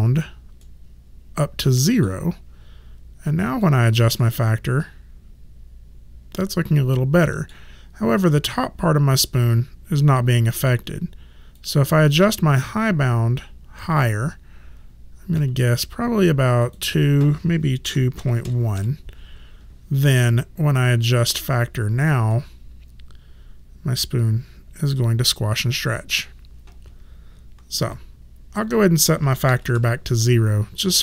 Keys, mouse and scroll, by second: 0.6 middle click, 3.5 click, 4.2 middle click, 11.5 click, 12.7 middle click, 16.6 click, 17.8 KP_2, 18.2 KP_Decimal, 18.4 KP_1, 18.7 KP_Enter, 21.2 click, 22.3 middle click, 28.6 click, 29.5 KP_0, 29.7 Return.